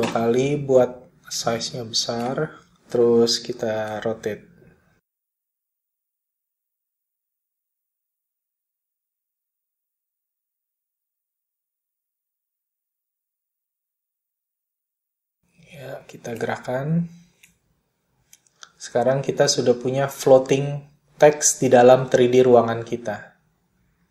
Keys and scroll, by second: 4.8 r, 8.4 p.